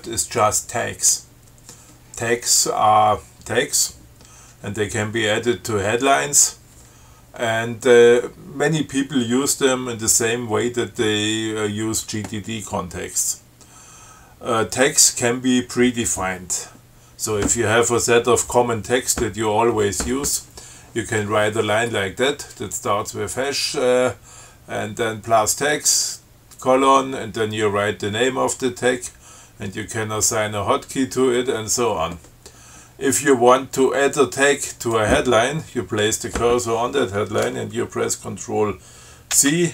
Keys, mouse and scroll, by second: 34.9 click, 39.5 ctrl+c.